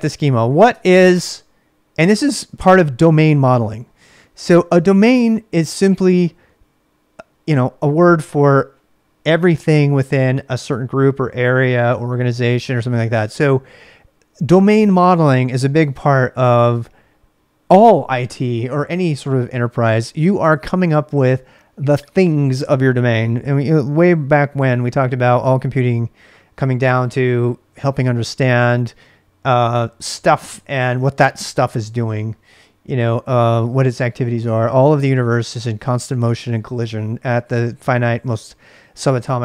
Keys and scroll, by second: 0.0-0.3 typing, 0.7 Return.